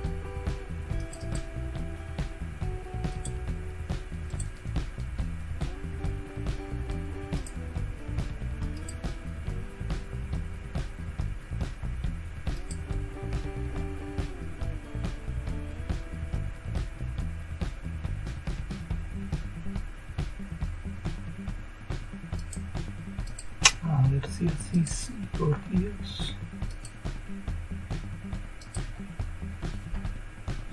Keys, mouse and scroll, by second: 1.0 click, 1.2 click, 3.1 click, 4.3 click, 7.4 click, 8.7 click, 12.6 click, 16.4 scroll down 2, 17.8-19.8 scroll down 2, 19.8-20.4 scroll down 1, 22.4 click, 23.3 click, 24.7 click, 26.7 click, 28.6 click.